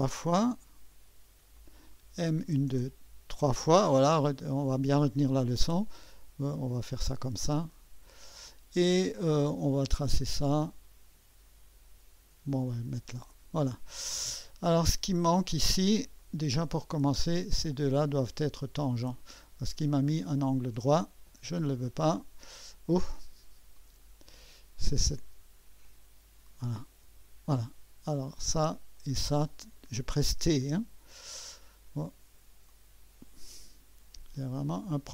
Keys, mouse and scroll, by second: 1.3-2.0 typing, 7.7-10.1 drag, 12.5 click, 18.2 click, 20.2 click, 21.6 Delete, 23.7 click, 25.8 click, 27.0 Delete, 28.1 click, 29.0 click, 30.2 t, 32.7 click, 32.7 typing, 34.3-35.1 drag.